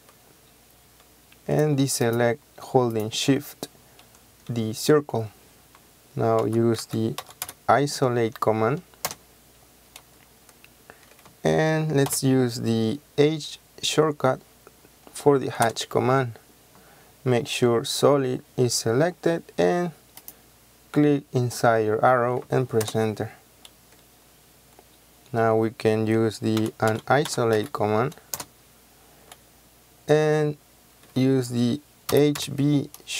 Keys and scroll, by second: 6.5-7.5 typing, 9.2 Return, 12.2 h, 15.7 Return, 22.9 Return, 26.7-27.7 typing, 28.4 Return, 31.9-32.7 typing.